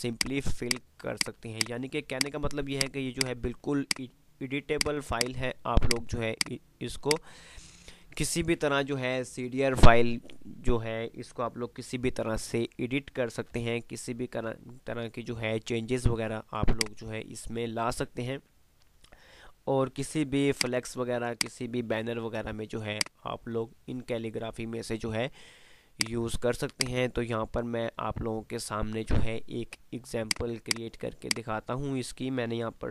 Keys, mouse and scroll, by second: 13.7 F3, 16.5 F2, 17.1 click, 20.7 click, 22.4 F2, 26.2-32.9 drag.